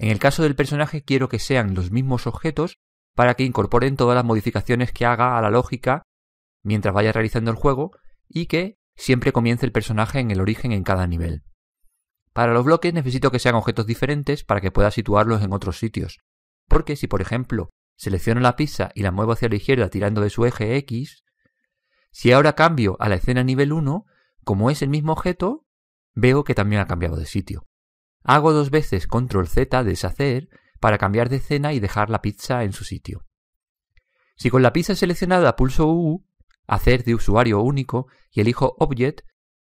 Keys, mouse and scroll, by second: 1.5-5.2 middle drag, 18.5 right click, 19.9 click, 22.2 click, 29.4 ctrl+z, 30.1 ctrl+z, 36.1 u.